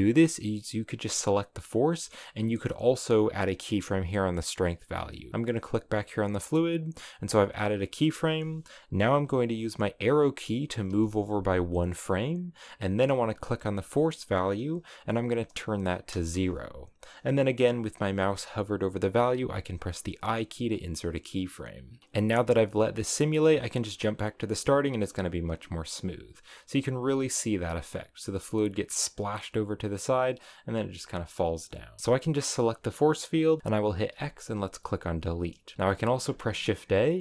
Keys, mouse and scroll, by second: 0.1 right click, 5.3 right click, 6.5-9.7 drag, 11.2 Right, 13.2-16.4 drag, 22.0 scroll down 3, 23.8-26.8 drag, 27.0-32.0 drag, 32.0 middle click, 32.4 right click, 34.0 x, 36.2 shift+a.